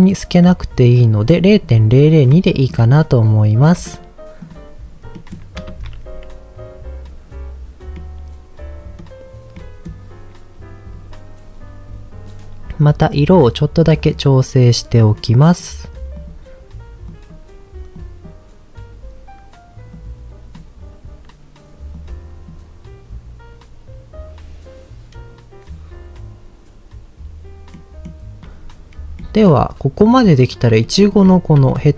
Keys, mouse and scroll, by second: 1.0-1.4 scroll up 2, 2.0 scroll down 1, 2.5 shift+middle drag, 3.6 middle drag, 4.3 click, 4.8-5.2 scroll down 1, 5.2 middle click, 5.7 ctrl+s, 10.9-11.9 scroll down 1, 12.8 middle click, 13.9 middle click, 15.0 click, 15.4 click, 27.7 middle click, 28.4-29.2 scroll up 2, 29.2-29.6 middle drag, 30.1 middle drag, 30.8-31.2 shift+middle drag, 31.7-31.9 shift+middle drag.